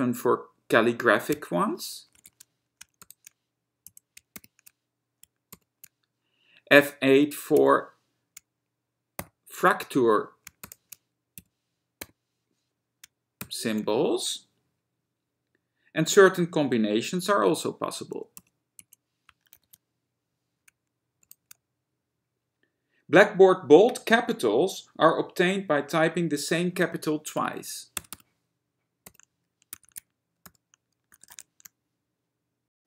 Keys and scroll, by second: 1.5 F7, 2.4 shift+a, 4.0 F7, 4.6 shift+f, 7.7 F8, 9.5 shift+m, 11.5 F8, 12.3 m, 18.6 F6, 18.9 F7, 19.8 shift+x, 28.2 shift+r, 28.4 shift+r, 30.0 shift+q, 30.2 shift+q, 31.4 shift+z, 31.6 shift+z.